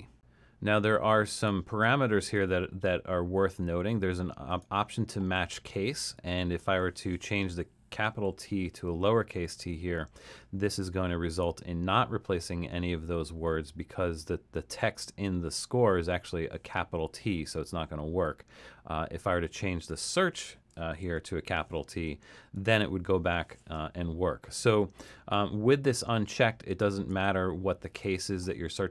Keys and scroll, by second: 8.3 t, 21.0 shift+t, 27.1 super+z.